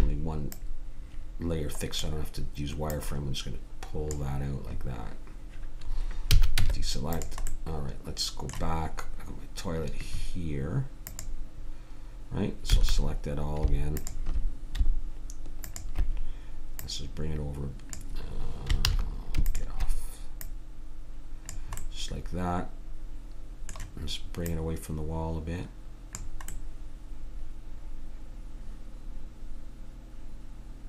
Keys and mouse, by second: 2.8 click, 3.9 click, 6.3 a, 6.6 Tab, 7.4 click, 11.0-12.6 drag, 12.6 a, 17.9 click, 18.8 ctrl+z, 19.4-20.5 drag, 24.0-25.2 middle drag, 25.2-26.4 drag, 26.6-28.1 middle drag.